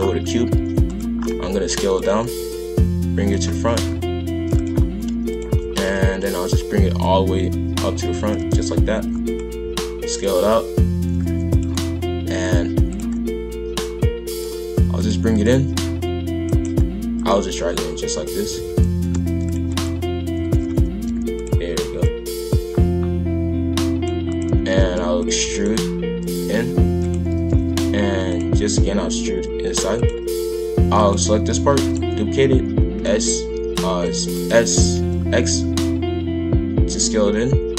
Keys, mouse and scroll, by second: 0.3 g, 1.2 scroll up 2, 1.3 s, 3.5 shift+f, 5.3 click, 5.7 shift+f, 7.0 click, 8.2 shift+f, 9.6 s, 10.3 shift+f, 12.3-15.0 drag, 15.3 click, 16.0 click, 17.1 click, 18.4 shift+f, 19.7 click, 20.4 shift+f, 22.0 click, 24.3 click, 24.5 shift+f, 25.4 e, 27.3 shift+f, 28.5 e, 30.9 click, 31.7 shift+d, 32.6 s, 34.6 s.